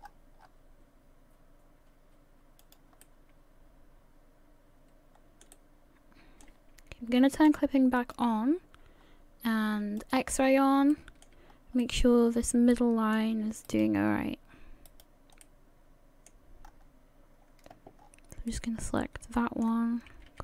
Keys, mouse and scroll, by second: 3.0 middle click, 5.5 middle click, 8.0 click, 10.0 click, 10.5-10.8 scroll up 1, 10.9 shift+middle click, 11.5 scroll up 1, 11.8 middle click, 13.9 alt+right click, 15.4 right click, 15.4 middle click, 16.7-17.4 scroll up 3, 17.4 scroll up 1, 18.0-18.4 scroll down 5, 18.5 middle click, 20.3 g.